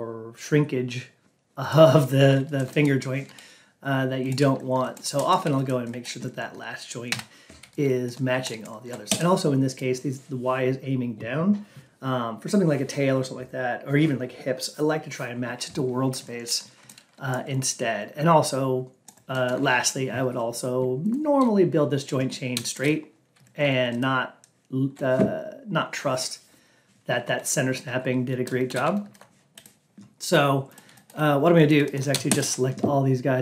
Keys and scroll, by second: 7.0 Down.